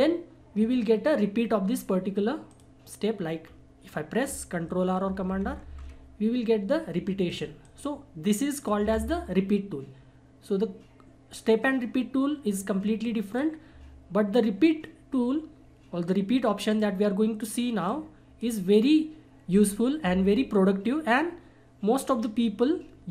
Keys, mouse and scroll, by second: 2.5 click, 3.4 scroll down 1, 3.8-4.3 scroll up 1, 5.0 ctrl+r, 7.2 click, 8.8 Delete, 13.0-16.2 drag, 16.7-20.8 drag.